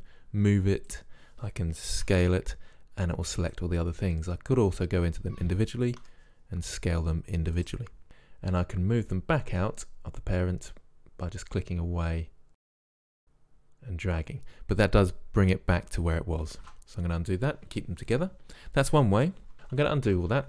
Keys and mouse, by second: 0.8-1.6 drag, 2.1 s, 4.7-6.6 drag, 6.1 s, 8.0 ctrl+z, 9.1-12.0 drag, 16.7-20.4 ctrl+z.